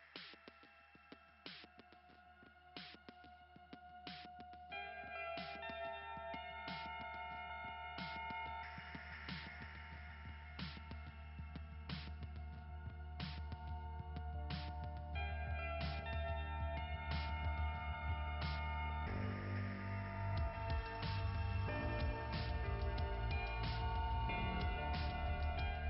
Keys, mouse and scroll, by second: 0.2 click, 1.0 scroll down 3, 1.1 click, 4.1 click, 5.5 click, 6.6 click, 9.0 click, 10.0 click, 12.0 click, 14.2-14.6 scroll down 2, 17.7-18.2 scroll up 3, 20.0-20.3 scroll up 2, 21.4 scroll down 1, 25.1 click.